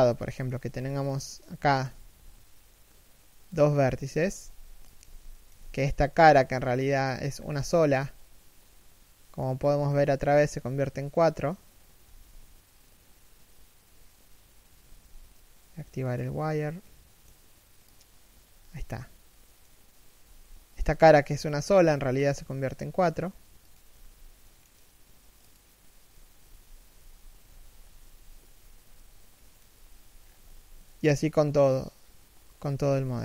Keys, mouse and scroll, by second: 0.0 shift+middle click, 0.4-0.7 scroll up 1, 0.7 right click, 1.5 shift+right click, 1.6 g, 3.6 middle click, 4.6 Tab, 4.7 z, 5.0 shift+middle click, 5.2 z, 5.5 right click, 5.8 middle click, 7.1 z, 7.2 scroll up 1, 7.5 z, 7.9 middle click, 9.2 scroll up 1, 14.6 z, 18.5 middle click, 27.4 scroll down 1, 27.6 3, 28.1 1, 28.6 shift+middle click, 29.9 scroll down 1, 30.6 shift+middle click.